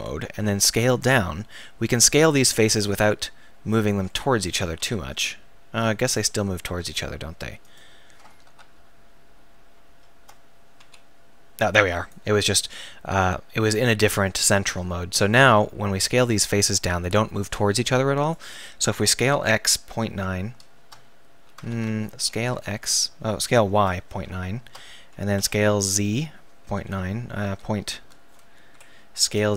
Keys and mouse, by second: 0.6 s, 4.8 s, 6.6 s, 8.7 alt+., 9.9 ctrl+., 10.8 s, 14.7 s, 18.3-20.8 right drag, 19.0 s, 20.8 click, 21.7 ctrl+z, 22.2 s, 25.4 s, 29.3 s.